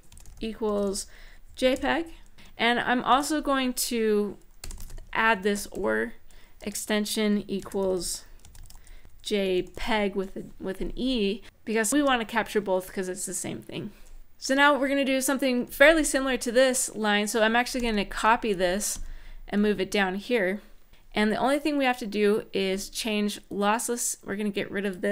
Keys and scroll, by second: 0.0-2.8 typing, 2.3 End, 4.1-6.0 typing, 6.4 Return, 7.3-9.2 typing, 11.3 Right, 11.9 shift+;, 15.4 Up, 15.6 Up, 17.5 alt+shift+Down, 18.7 alt+Down.